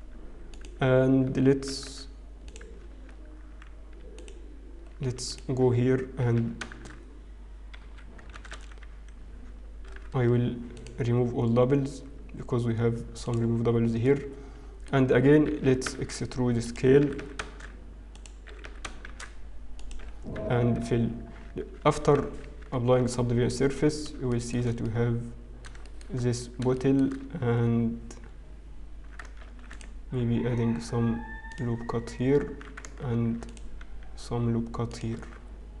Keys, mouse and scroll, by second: 1.8 g, 4.5 g, 5.7 click, 7.4 e, 8.3 a, 8.7 a, 9.8 alt+m, 13.2 alt+click, 13.8-14.6 scroll down 3, 14.6 middle click, 16.7 e, 17.1 e, 19.0 shift+e, 20.1 f, 20.4 Tab, 20.9-21.5 scroll down 3, 21.5-22.1 scroll down 2, 22.5 ctrl+2, 23.0 middle click, 23.5-23.9 scroll up 2, 23.9 scroll down 1, 24.4 shift+middle click, 24.4 scroll down 1, 24.8 middle click, 29.0 Tab, 29.0 shift+middle click, 29.0-29.3 scroll down 1, 29.4 ctrl+r, 33.9 ctrl+r, 33.9-35.8 scroll up 1.